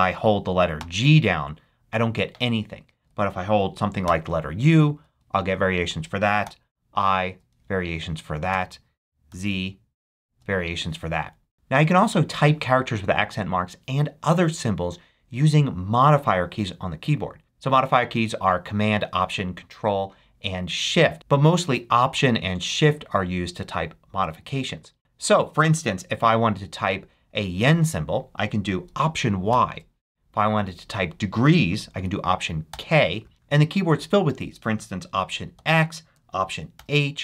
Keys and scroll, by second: 0.7 g, 3.0 BackSpace, 4.0 u, 5.7 BackSpace, 6.4 i, 8.5 BackSpace, 9.3 z, 29.5 alt+y, 32.7 alt+k, 35.5 alt+x, 36.7 alt+h.